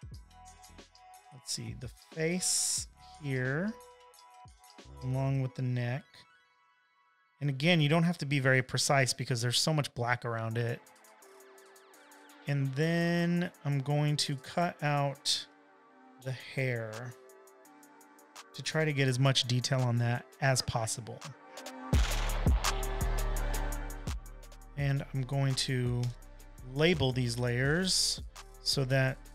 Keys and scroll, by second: 2.5 super+d, 14.0 super+j, 17.9 |, 26.0 super+j, 27.3-28.5 typing.